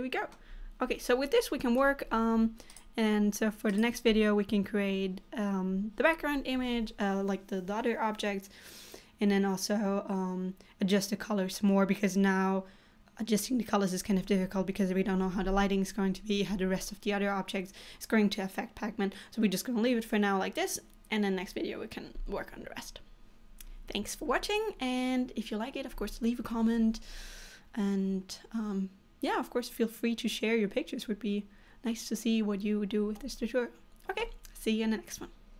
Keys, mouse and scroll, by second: 0.7 scroll down 2, 1.6 middle click, 2.9 click, 3.7 click, 4.2-4.7 scroll up 3.